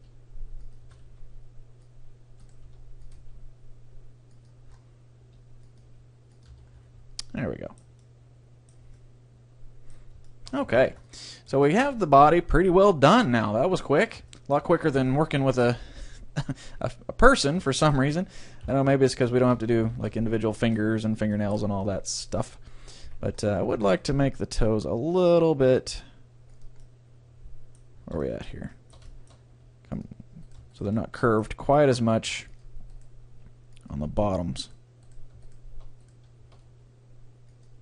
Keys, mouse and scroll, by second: 0.0 g, 0.8 a, 1.1 c, 2.7 r, 3.3 g, 4.7-5.9 middle drag, 5.3 r, 5.9 g, 6.7 Tab, 7.4-10.7 middle drag, 10.7 ctrl+s, 13.5 middle click, 14.1 scroll up 1, 14.3-15.8 middle drag, 17.5 middle click, 18.6 KP_3, 19.9 Tab, 22.4 a, 23.1 c, 23.9-25.7 drag, 24.1 g, 26.7-28.4 drag, 26.8-30.8 middle drag, 29.5 g, 30.5-31.7 drag, 30.5-32.4 right drag, 30.9-32.4 middle drag, 31.8 g, 32.6-34.6 drag, 33.0-34.6 right drag, 33.3 g, 34.7-35.7 drag, 34.7-37.7 right drag, 36.8 g, 37.7-37.8 drag.